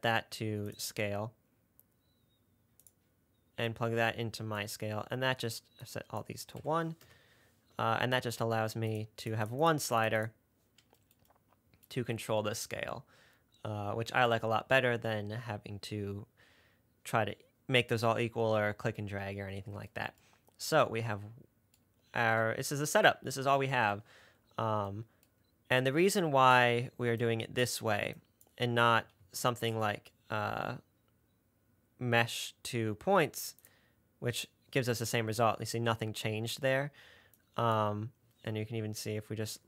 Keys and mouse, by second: 0.2 drag, 1.1-3.2 drag, 4.0-6.1 drag, 26.2 click, 27.5 click, 28.4 click, 29.5 shift+a, 37.6 click.